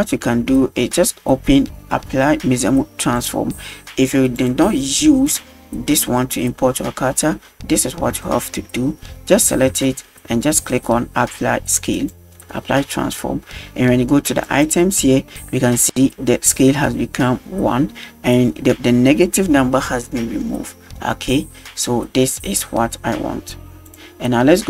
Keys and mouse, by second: 3.1 click, 4.4-7.4 drag, 8.3 shift+middle drag, 9.9 shift+middle drag, 12.0 click, 14.5 click, 23.9 click.